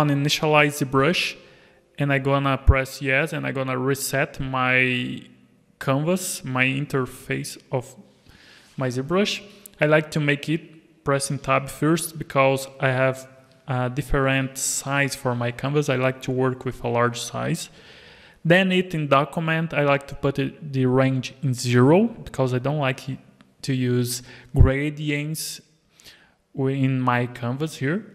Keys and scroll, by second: 11.4 alt+a, 27.3 Tab.